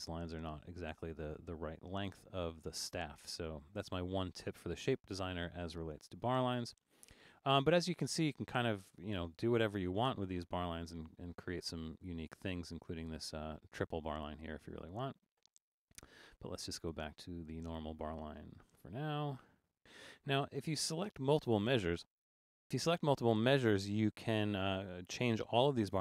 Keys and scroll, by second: 20.2 super+-, 25.6 Return.